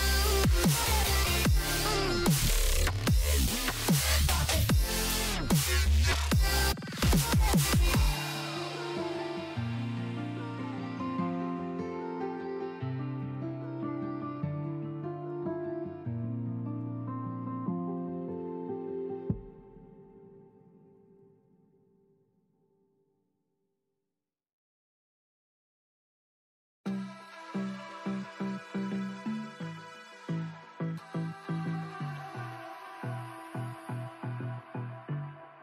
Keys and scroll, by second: 32.3 ctrl+v, 33.1 Return.